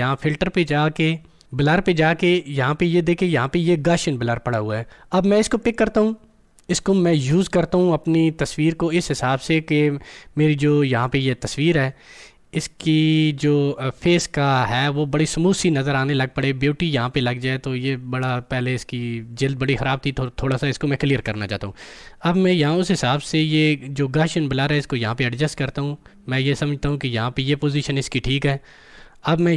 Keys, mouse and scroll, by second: 0.1 click, 5.6 click, 22.9-29.5 drag.